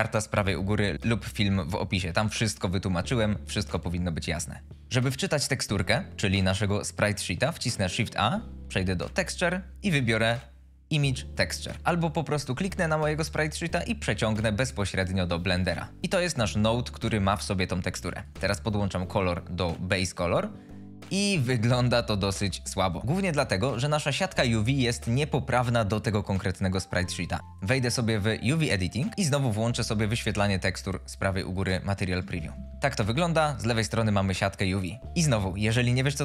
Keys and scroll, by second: 8.1 shift+a.